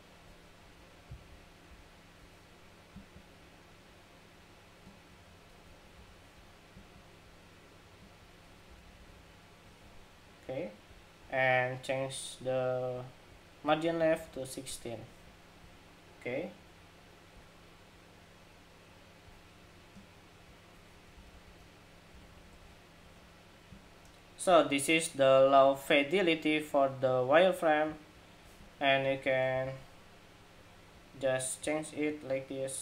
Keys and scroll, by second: 0.3 alt+Down, 0.8 alt+Down, 1.0 alt+Down, 1.4 alt+Down, 5.6 alt+Up, 8.4 alt+Down, 8.6 alt+Down, 8.7 alt+Down, 8.9 alt+Down, 13.7 alt+Left, 13.9 alt+Left, 14.1 alt+Left, 14.4 alt+Left, 20.8 alt+shift+Up, 21.0 alt+shift+Up, 21.9 alt+Up, 22.0 alt+Up, 22.2 alt+Up, 22.3 alt+Up, 22.9 alt+Up.